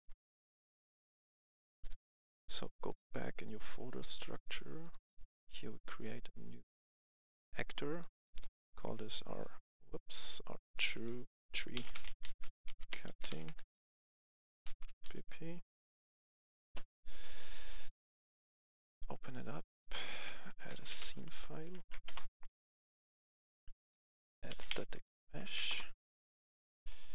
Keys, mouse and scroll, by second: 0.0-1.3 typing, 1.1-2.8 drag, 4.9 right click, 5.8 click, 8.5 F1, 10.7 click, 10.9 F2, 11.7-13.5 typing, 14.6 shift+b, 15.0 shift+p, 16.1 Return, 17.2 click, 20.4-20.9 typing, 21.5 Down, 21.7 Down, 22.0 Return, 22.6 click, 24.3 typing, 25.2 Down, 25.6 Return, 26.3 click.